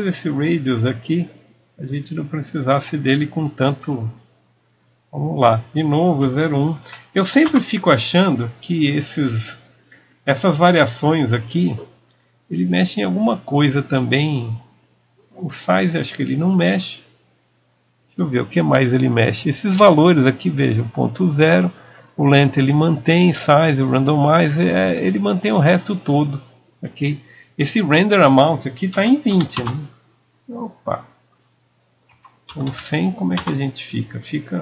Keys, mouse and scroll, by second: 17.8 KP_Enter, 17.8-19.2 drag, 24.7 click.